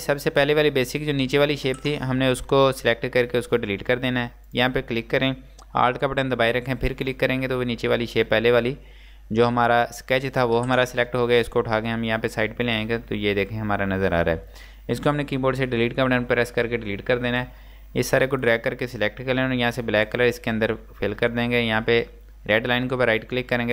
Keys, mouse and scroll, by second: 4.5 click, 7.0 alt+click, 12.0 click, 16.3 Delete, 17.5 click, 23.2 click, 23.3 right click.